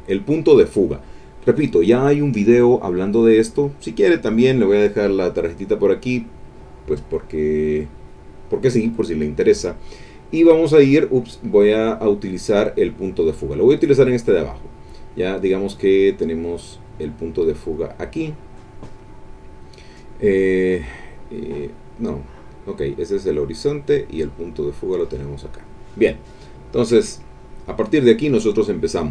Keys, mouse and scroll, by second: 0.2 middle click, 5.8 middle click, 8.1 click, 9.8 middle click, 11.4 click, 12.4 middle click, 13.2 middle click, 13.7 middle click, 16.5-17.9 drag, 21.4-25.3 drag, 26.7 click.